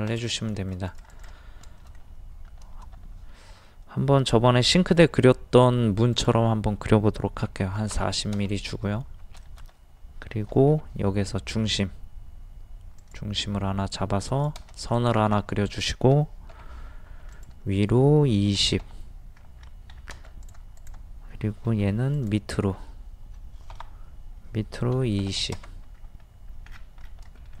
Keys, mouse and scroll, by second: 0.1 click, 0.5 shift+middle click, 0.9 click, 1.8 shift+middle click, 4.9 o, 6.1 click, 7.5 KP_4, 7.7 KP_0, 8.8-9.1 scroll up 1, 9.4 shift+middle click, 13.0 click, 15.4 middle click, 16.6 m, 17.3 ctrl+click, 18.5 KP_2, 18.6 KP_0, 19.6-19.9 scroll up 1, 20.4 click, 21.7 m, 22.2 click, 23.7 Up, 24.9 KP_2, 25.1 KP_0, 26.0 scroll up 1, 26.7-27.0 scroll down 1, 27.4 shift+middle click.